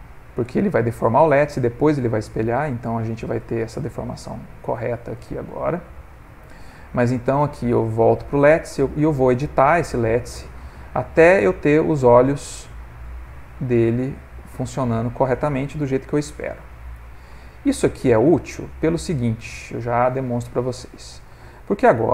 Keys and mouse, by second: 2.1 middle click, 3.3 middle click, 4.2 middle click, 4.7 middle click, 6.3 click, 7.9 click, 8.4 ctrl+middle click, 8.6 ctrl+middle click, 9.2 Tab, 10.1 click, 11.2 g, 13.9 click, 14.6 g, 16.0 click, 16.6 g, 18.0 click, 18.4 g, 19.4 click, 19.9 g, 20.6 middle click, 20.8 middle click, 21.1 middle click, 21.5 ctrl+middle click, 21.6 ctrl+middle click.